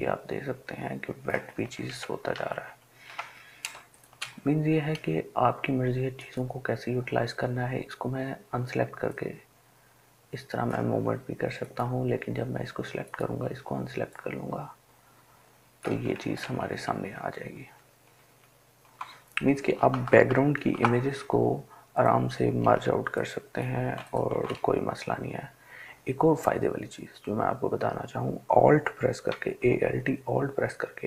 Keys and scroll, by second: 2.5 ctrl+alt+z, 2.8 ctrl+alt+z, 16.6 ctrl+alt+z, 17.0 ctrl+alt+z, 17.5 ctrl+alt+z, 20.8-26.0 ctrl+j.